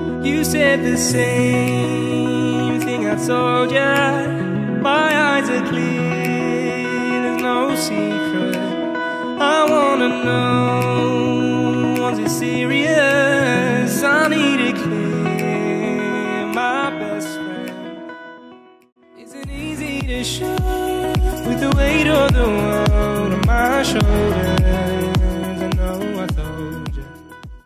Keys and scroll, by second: 0.2 ctrl+0.